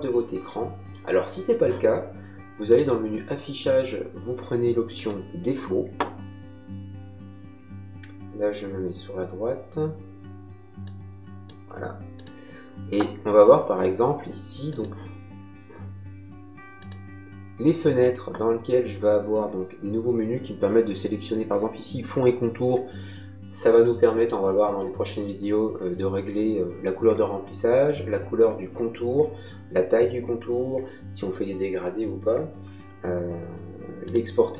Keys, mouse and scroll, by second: 2.6 click, 4.9 click, 10.8 click, 12.1 click, 14.6 click, 16.7 click, 34.0 click.